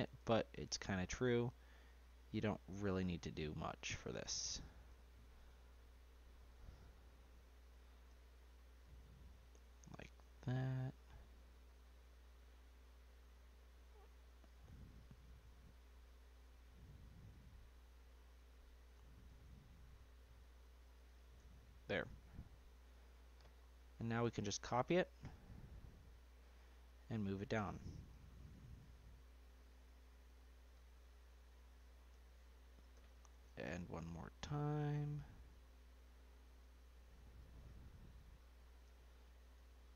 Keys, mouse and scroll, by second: 0.1 s, 4.0-4.9 scroll down 5, 4.9 s, 7.0-7.4 scroll up 2, 8.1 s, 13.2-13.8 scroll up 3, 13.9-16.5 shift+middle drag, 16.5 g, 18.9 s, 21.3-22.3 middle drag, 22.3 scroll down 1, 22.5-24.8 middle drag, 24.8 ctrl+c, 25.6 ctrl+v, 25.9 scroll down 2, 26.1-27.1 middle drag, 27.1 g, 32.1 ctrl+v, 32.9 g, 37.4 ctrl+v, 38.8 g.